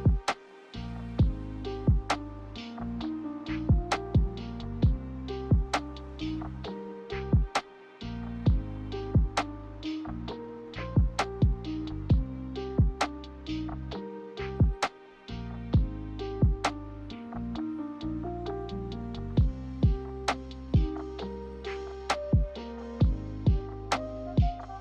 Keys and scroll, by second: 1.1-1.9 typing, 18.0-19.0 typing.